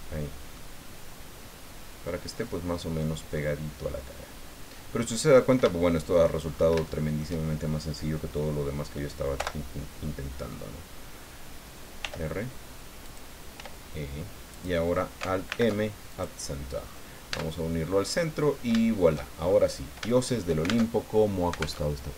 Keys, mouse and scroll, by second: 0.6-2.6 middle drag, 2.7-3.3 scroll down 4, 3.4-5.2 middle drag, 5.3-5.6 scroll up 3, 5.7 shift+middle click, 6.5-6.8 shift+scroll up 1, 6.9 shift+click, 9.4 o, 12.0 r, 13.1 click, 13.6 e, 14.5 click, 15.5 alt+m, 16.1 alt+click, 16.8-17.1 scroll down 2, 17.3 Tab, 17.8 scroll down 2, 18.5 scroll down 3, 18.8 shift+middle click, 19.4-19.7 shift+scroll up 3, 20.1 shift+middle click, 20.9 alt+shift+Tab, 21.9 alt+Tab.